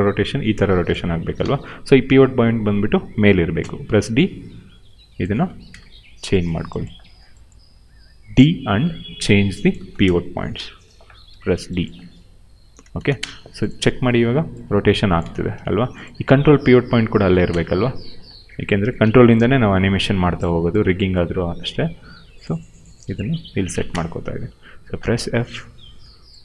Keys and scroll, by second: 1.0 ctrl+z, 1.3 w, 3.5 d, 5.3 space, 9.7 space, 12.9 space, 13.7 e, 15.1 ctrl+z, 15.4 q, 17.1 space, 18.7 d, 23.6 space, 24.9 f.